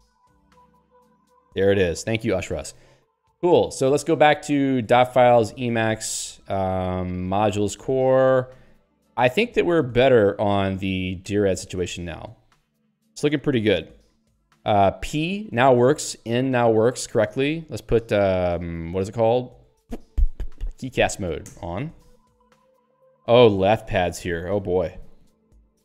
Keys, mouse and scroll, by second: 21.6 Return.